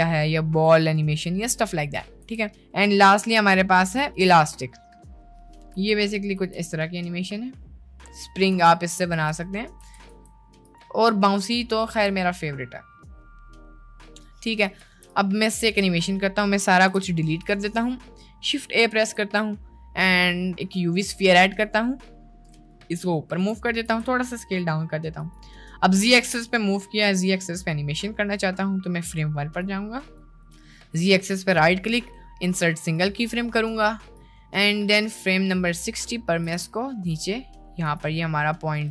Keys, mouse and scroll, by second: 0.8 click, 1.6 click, 2.2 a, 2.6 a, 2.8 t, 4.9 space, 5.9-6.3 drag, 5.9 space, 6.5 space, 8.7 space, 8.9 click, 9.2 space, 10.0 space, 10.2 t, 11.6 click, 12.0 space, 14.8 space, 15.2 click, 16.0 right click, 16.7 a, 16.8 x, 21.6 click, 22.6 g, 23.9 s, 27.8 middle click, 29.6 click, 31.2-33.2 middle drag, 34.2-36.0 drag, 36.4 g.